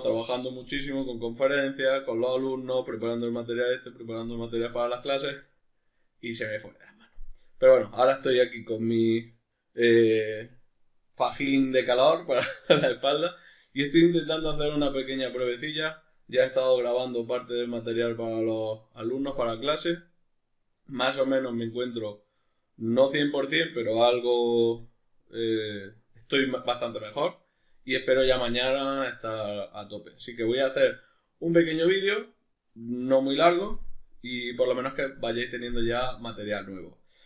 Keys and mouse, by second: 25.3 middle click.